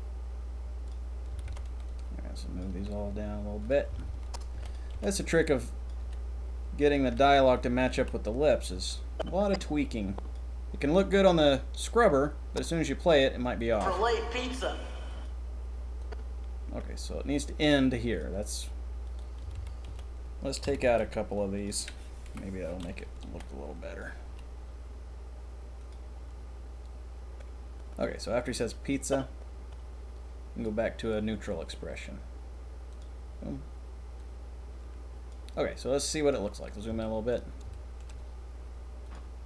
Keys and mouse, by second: 1.2 a, 1.4 a, 1.6 b, 2.7 g, 3.8 a, 4.0 a, 4.3-4.6 drag, 4.9 b, 6.0 g, 7.2 c, 8.1 g, 9.6 drag, 13.4 click, 15.0 click, 15.9-18.1 drag, 19.0 click, 19.4-20.9 typing, 22.2 Delete, 23.2 b, 24.2 g, 25.7-26.2 drag, 27.3-30.6 drag, 34.1-35.1 drag, 36.9 shift+middle drag, 37.7 shift+middle click, 39.0 middle drag.